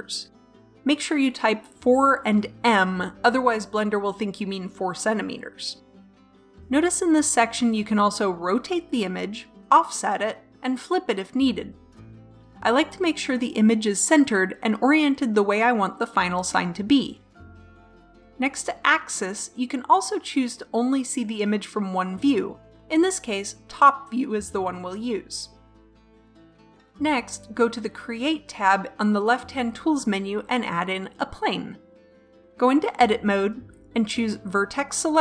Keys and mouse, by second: 6.8 middle click, 7.9 middle click, 9.7-13.5 drag, 14.9-17.6 drag, 21.5-23.5 drag, 29.9-31.6 drag, 33.5 Tab, 33.8 click.